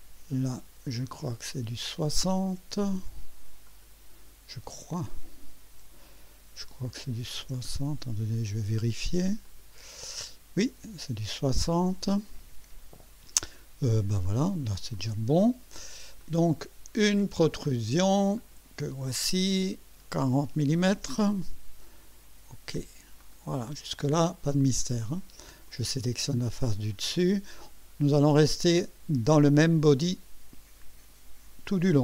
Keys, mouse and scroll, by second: 1.4 click, 3.6 click, 7.2 KP_6, 7.4 KP_0, 7.6 Return, 9.4 click, 12.1 click, 14.9 click, 16.2-17.2 drag, 18.3 click, 20.6 KP_4, 20.9 KP_0, 23.2 click, 24.0 scroll down 1, 24.5-25.3 drag, 25.6 click.